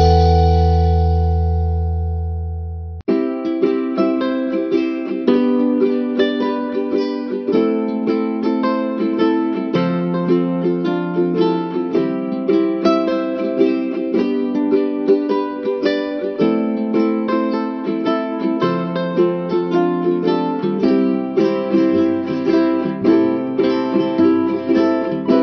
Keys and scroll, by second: 8.3 ctrl+-, 11.4 ctrl+-, 12.7 ctrl+=, 14.7 space, 15.8 ctrl+=.